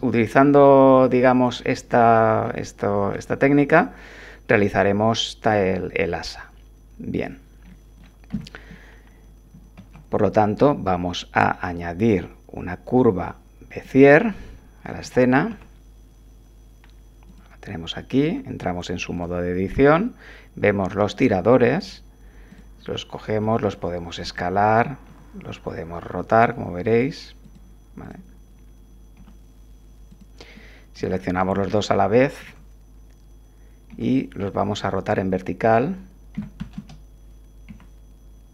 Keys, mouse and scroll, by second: 1.0 ctrl+z, 1.7 ctrl+click, 3.1 Tab, 7.1 click, 7.7 click, 8.3 7, 9.8 shift+a, 13.7 click, 15.0 g, 15.5 x, 17.3 click, 18.2 Tab, 19.1 click, 22.5 click, 23.4 s, 24.2 click, 25.1 r, 27.4 click, 28.0 click, 29.2 s, 31.1 shift+click, 32.4 1, 33.9 r, 36.3 9, 36.6 0, 36.8 Return, 37.7 7.